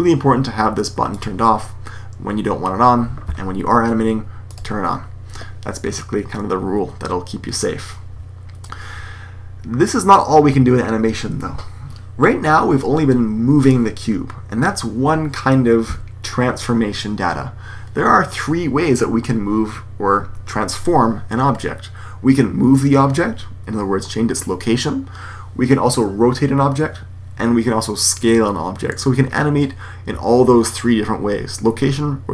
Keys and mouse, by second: 1.0-2.9 drag, 4.4-6.1 drag.